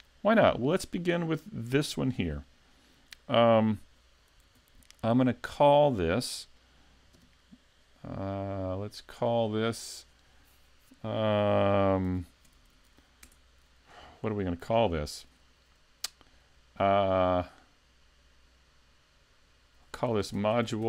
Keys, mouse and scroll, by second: 0.4 right click, 7.1 s, 7.1 KP_Decimal, 7.9-9.4 scroll down 2, 9.4 click, 9.6 click.